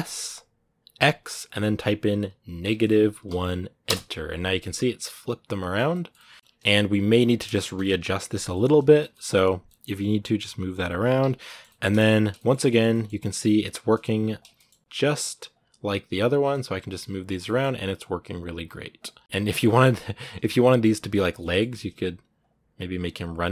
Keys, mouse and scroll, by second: 4.5-6.2 middle drag, 6.2-7.7 scroll up 4, 6.4 middle click, 7.7 KP_1, 8.3 shift+middle click, 8.5-8.9 scroll up 3, 8.9 shift+middle click, 9.4 g, 10.9 scroll down 4, 11.2 shift+middle click, 12.0 right click, 12.2 middle click, 13.0 r, 14.3 shift+middle click, 14.8 right click, 14.9 r, 16.2 right click, 16.3 r, 17.1 right click, 17.2 middle click, 17.4 r, 18.2 right click, 18.4 g, 19.1 right click, 19.2 middle click, 20.0 right click, 20.2 scroll down 1, 20.3 r, 21.0 right click, 21.1 scroll down 1, 21.1 middle click, 21.4 r, 22.6 right click, 23.0 r.